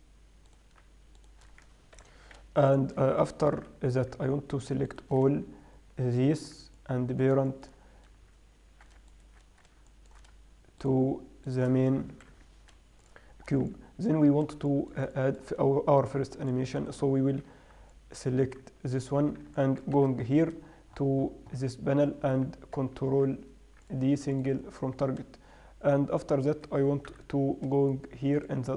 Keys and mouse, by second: 0.9-3.2 right drag, 2.4 ctrl+p, 3.7 middle click, 3.9 alt+h, 4.3-5.3 right drag, 12.7 ctrl+p, 13.7-14.1 middle drag, 15.5 middle click, 17.2-18.4 right drag, 17.9 h, 20.3 n, 23.5 ctrl+d, 27.5 n.